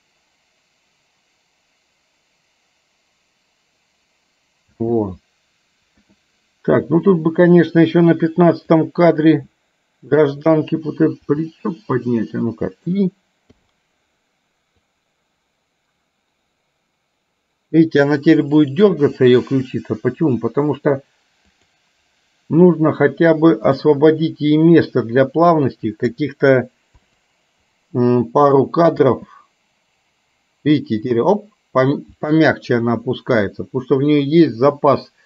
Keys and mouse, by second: 4.9 space, 6.0 KP_1, 7.1 click, 8.8 click, 11.3 r, 13.6 i, 15.0-19.1 drag, 21.6 click, 23.9 click, 24.6-26.1 drag, 27.0 Delete, 28.5 click, 29.1 space.